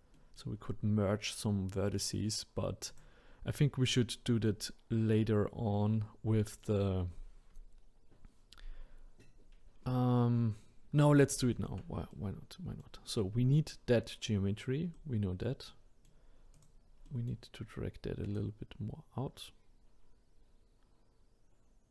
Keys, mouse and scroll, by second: 2.8 click, 4.0-4.4 scroll up 3, 11.4-16.5 shift+middle drag, 16.5 click, 17.0-18.3 middle drag, 18.3 click.